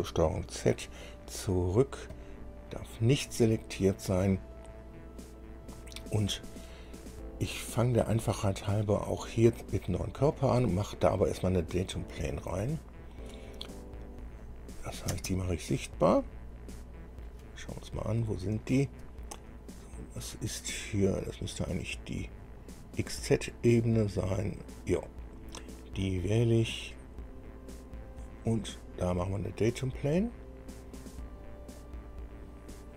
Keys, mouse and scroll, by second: 0.9 ctrl+z, 1.7 scroll down 2, 2.3 click, 10.6 click, 13.2 scroll down 2, 14.6 click, 15.3 space, 16.4-17.6 middle drag, 17.7-18.0 scroll down 1, 18.2-18.6 scroll up 1, 18.8 shift+middle click, 19.5-19.9 shift+scroll up 1, 20.5 scroll up 1, 23.0 scroll up 1, 26.2 click, 27.2 click, 28.0 click, 28.7 scroll down 2, 32.0 click.